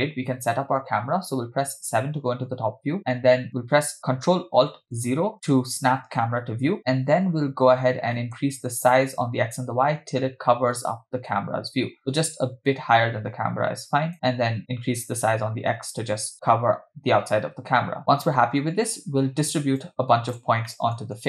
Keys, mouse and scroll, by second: 1.6 KP_7, 7.3-8.1 scroll up 1, 8.1 scroll up 2, 8.2 middle click, 9.0-14.1 shift+drag, 15.1-18.0 drag, 18.4-19.8 scroll down 4, 19.8 click, 20.7 middle click.